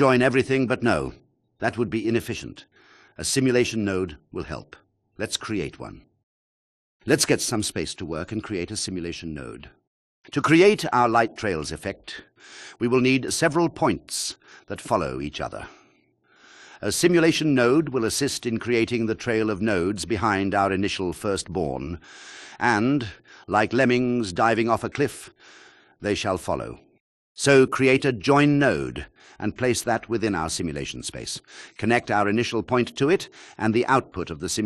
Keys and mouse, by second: 2.3 click, 3.6-4.9 drag, 7.2 g, 9.7 shift+a, 13.7 click, 14.5 shift+click, 16.6 click, 19.2 click, 25.2 shift+a, 27.6-28.3 drag, 28.6 click.